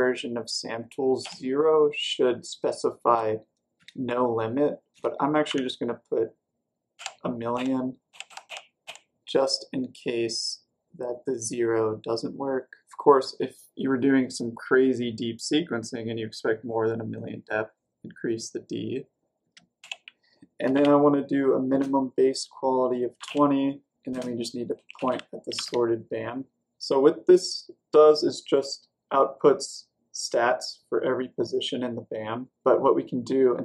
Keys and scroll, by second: 1.2 0, 3.0 space, 5.4 typing, 6.6-8.9 typing, 19.4-21.6 typing, 22.9-25.9 typing.